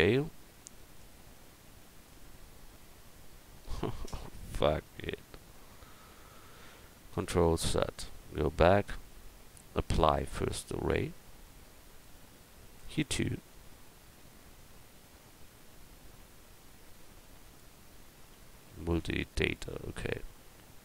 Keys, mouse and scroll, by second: 1.5-5.9 drag, 7.4 ctrl+z, 8.0 ctrl+z, 9.9-11.2 drag, 11.5 click, 11.8-15.0 right drag, 12.9-15.0 drag, 16.4 Tab, 17.4 click, 18.2-19.4 right drag, 19.2 click.